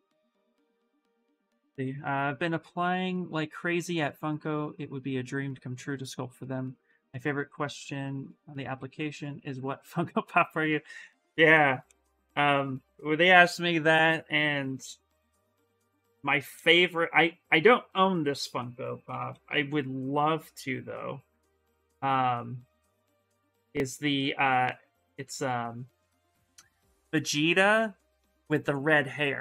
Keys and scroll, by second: 15.8 s, 18.6-19.7 typing.